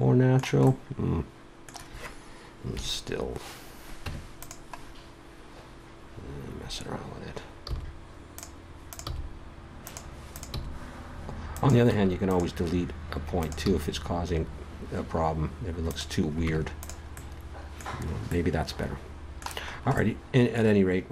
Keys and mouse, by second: 2.7 KP_3, 4.0 Tab, 4.8-6.0 middle drag, 7.6 g, 9.1 g, 10.5 g, 11.9 x, 13.4-15.3 drag, 13.7 g, 16.4 Tab.